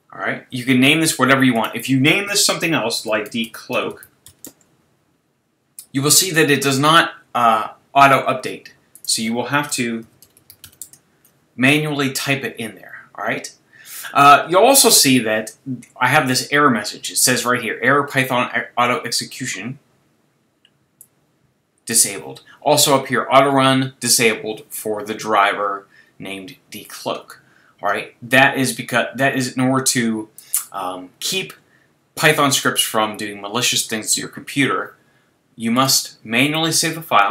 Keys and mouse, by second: 1.5-3.4 drag, 8.9-10.8 drag, 21.0-23.0 drag, 29.2-31.0 drag, 35.8-37.3 drag.